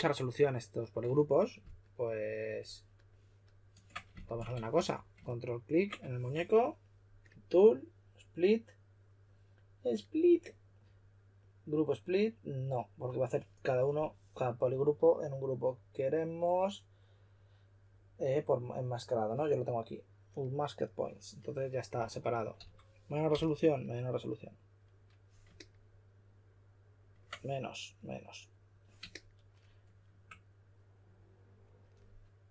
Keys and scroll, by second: 4.7 w, 22.5-23.8 typing.